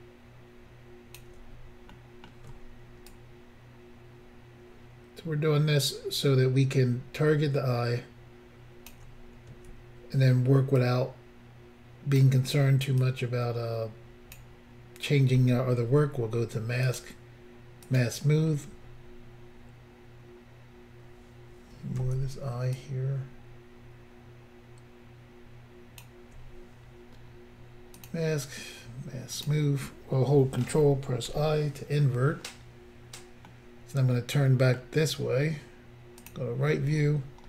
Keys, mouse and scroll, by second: 1.9 middle click, 3.1 ctrl+click, 10.8 ctrl+click, 13.0 ctrl+click, 17.0 click, 17.8 click, 18.0 click, 22.8 ctrl+click, 28.0 click, 28.1 click, 29.4 click, 29.5 click, 31.3 ctrl+i, 33.5 middle click, 36.2 click.